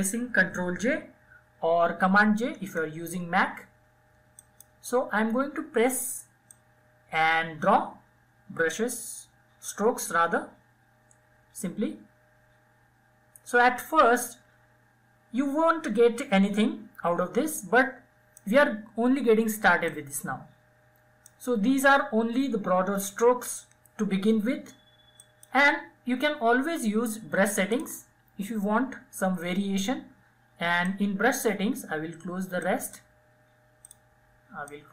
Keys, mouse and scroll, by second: 1.1 ctrl+j, 3.1-15.2 drag, 18.6-22.5 drag, 23.9 click, 26.5 click, 29.5-34.9 drag.